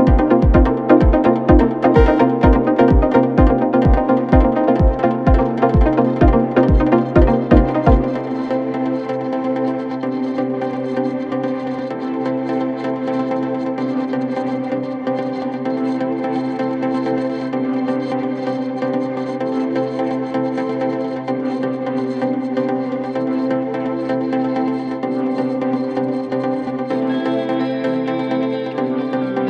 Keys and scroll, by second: 2.5 F9, 6.7 Escape, 9.1 ctrl+z, 10.6 F9, 24.2 Escape, 27.3 F9.